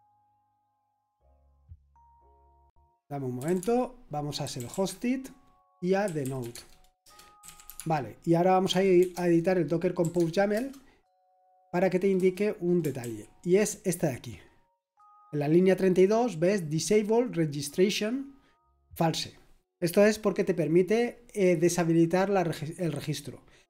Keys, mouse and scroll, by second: 2.6 Return, 3.1-9.0 typing, 10.0-10.5 typing, 12.1 Return, 13.0 ctrl+d, 13.6-14.8 typing.